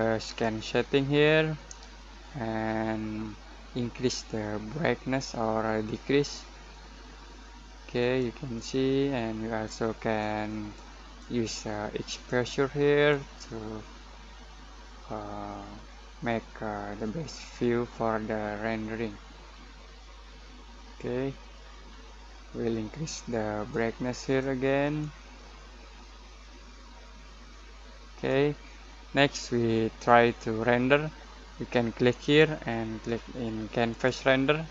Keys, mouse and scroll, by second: 0.2 click, 4.1-23.7 drag, 23.7-31.3 drag, 32.2-34.7 drag.